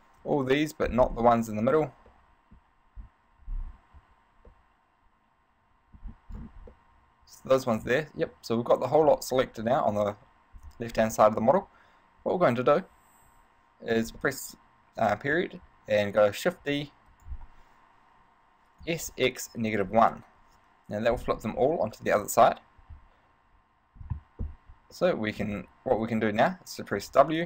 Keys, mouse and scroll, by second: 0.4 KP_1, 1.3-2.0 scroll up 3, 1.8 z, 2.1 b, 3.2 scroll down 2, 3.6-4.2 scroll up 6, 4.2 z, 4.7 middle click, 6.2-6.5 scroll down 6, 6.9 middle click, 9.7 middle click, 11.4 middle click, 13.4 ., 14.4 middle click, 16.8 shift+d, 17.4 right click, 19.0 s, 21.8 middle click, 25.0 middle click, 25.7-27.1 scroll up 2, 27.3 w.